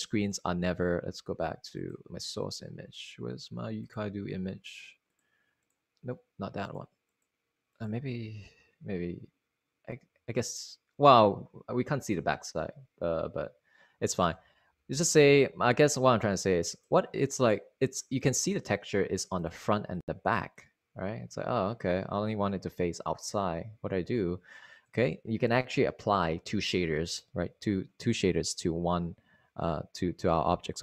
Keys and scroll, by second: 1.5 super+Left, 14.9 super+Tab.